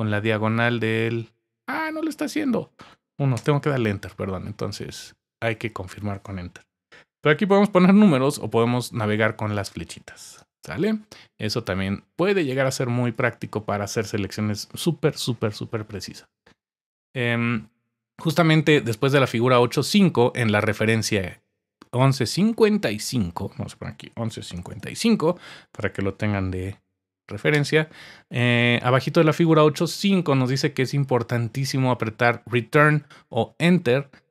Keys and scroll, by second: 0.1 typing, 3.3 Return, 8.0 Up, 8.7 typing, 9.1 Page_Down, 9.3 Page_Down, 23.9-25.2 typing.